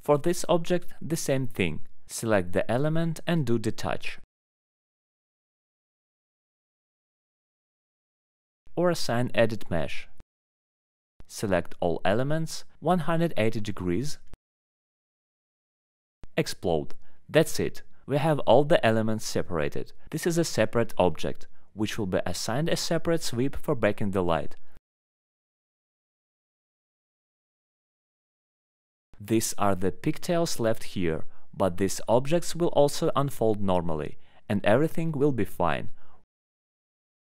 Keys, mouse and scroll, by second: 1.0 click, 1.5 click, 1.5 alt+middle click, 3.7 right click, 3.8 click, 4.7 click, 5.6 click, 6.8 click, 7.8 click, 9.2 click, 10.1 click, 10.9 click, 13.1 click, 13.8 click, 14.5 click, 17.0 click, 18.2 click, 19.5 click, 20.6 click, 21.5 click, 22.2 click, 22.6 click, 23.4 click, 24.0 click, 24.5 click, 25.1 click, 25.6 click, 26.2 click, 26.7 click, 27.3 click, 27.8 scroll, 28.5 alt+middle click, 29.2 scroll, 29.3 click, 30.3 alt+middle click, 30.7 alt+middle click, 32.0 alt+middle click, 32.5 scroll, 32.6 alt+middle click, 33.0 middle click, 33.5 alt+middle click, 33.7 scroll, 34.4 alt+middle click, 35.9 click, 36.5 alt+middle click.